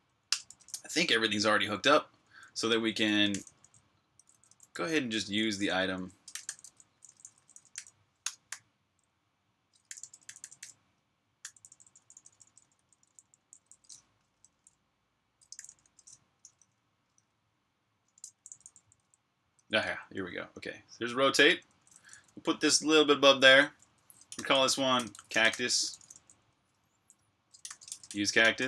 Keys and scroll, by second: 0.1 Return, 1.8-10.4 typing, 11.6 typing, 15.1-22.2 typing, 23.3-26.5 typing.